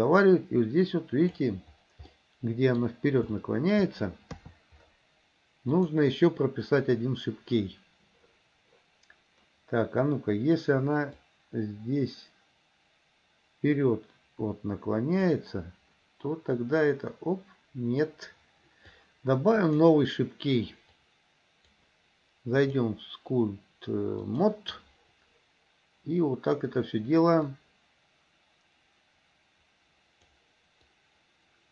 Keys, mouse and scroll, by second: 2.3 middle click, 3.5 shift+middle click, 4.5 KP_3, 5.9 click, 11.4-15.6 drag, 16.9 click, 19.8 click, 20.9 click, 22.8 click, 27.6 click, 31.0 click.